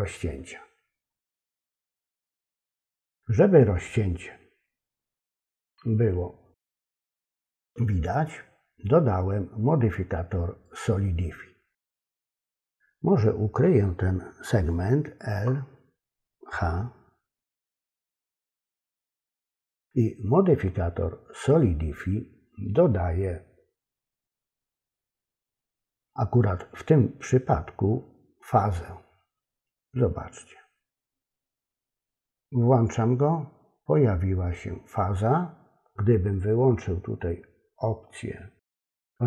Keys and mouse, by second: 2.5 click, 10.7 click, 32.7 click.